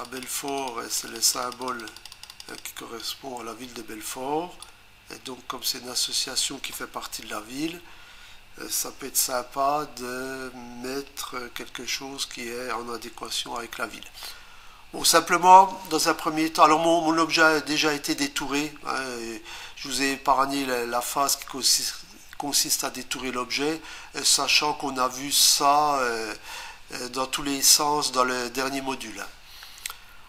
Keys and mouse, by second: 0.0 ctrl+double click, 0.0 ctrl+click, 0.5 ctrl+click, 1.2 ctrl+click, 1.3 ctrl+double click, 1.4 ctrl+click, 1.8 ctrl+click, 1.9 ctrl+click, 2.1 ctrl+click, 2.4 ctrl+double click, 2.5 ctrl+click, 4.6 click.